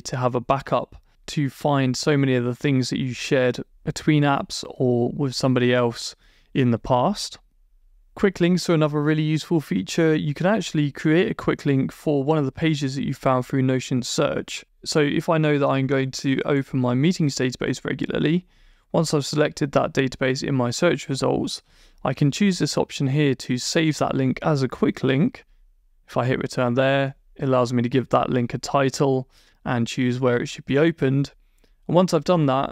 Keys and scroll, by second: 7.7 Escape, 12.2 Down, 12.6 Return, 21.2 Down, 25.7 Return.